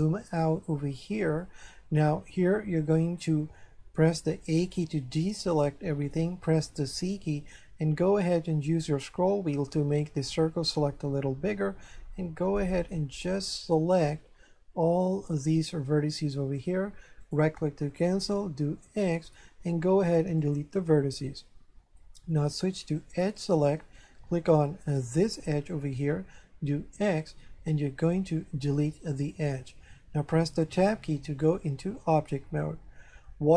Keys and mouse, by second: 0.3 shift+middle click, 4.7 a, 7.0 c, 13.0 click, 17.2 right click, 18.7 x, 20.4 click, 22.9 click, 24.8 right click, 26.9 x, 29.3 click, 30.9 Tab, 31.7 shift+middle click.